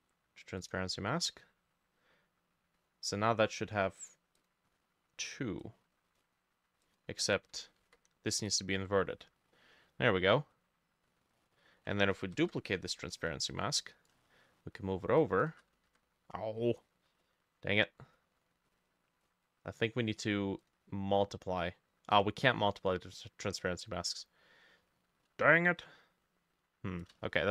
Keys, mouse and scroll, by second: 4.4 double click, 7.8 ctrl+i, 9.1-9.6 scroll up 1, 9.6 middle click, 9.9-10.2 scroll up 2, 10.6-11.3 scroll down 1, 11.4 middle click, 11.6-11.9 scroll down 1, 12.4 ctrl+j, 12.9 scroll down 1, 13.1 middle click, 13.6 t, 15.9 ctrl+z, 16.4 scroll down 1, 16.6 middle click, 17.2-17.8 scroll up 1, 17.8-18.2 scroll down 1, 18.2 scroll up 1, 27.2-27.5 shift+drag, 27.2-27.5 shift+middle drag.